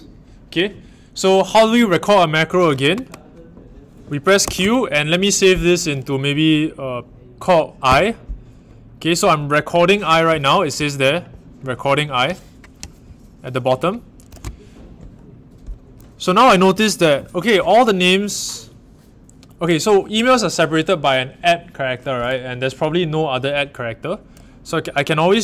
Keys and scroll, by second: 4.4 a, 7.8 i.